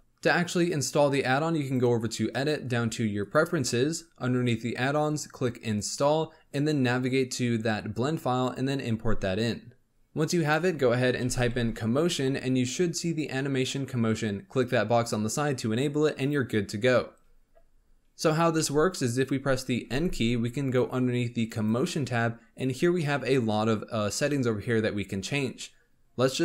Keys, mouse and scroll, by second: 1.5-4.7 drag, 18.5-19.8 middle drag, 19.8 n, 21.5 click, 22.9-26.4 middle drag.